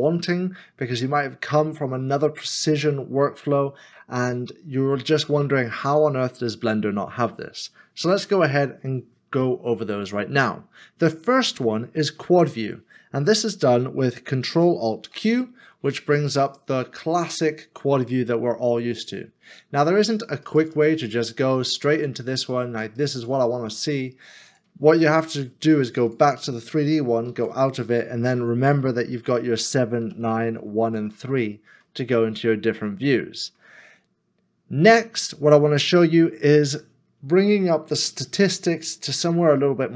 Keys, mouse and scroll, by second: 14.9 ctrl+alt+q, 27.3 ctrl+alt+q, 29.7 KP_7, 30.0 KP_9, 30.5 KP_1, 31.0 3, 32.0 middle click, 32.5 scroll down 1, 33.1 middle click, 34.5 scroll up 1.